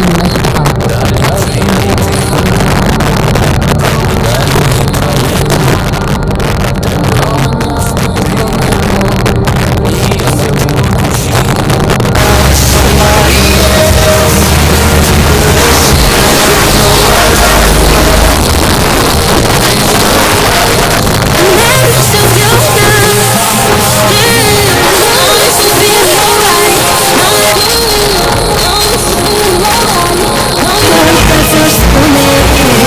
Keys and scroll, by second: 18.3 Page_Down, 27.5 Page_Down.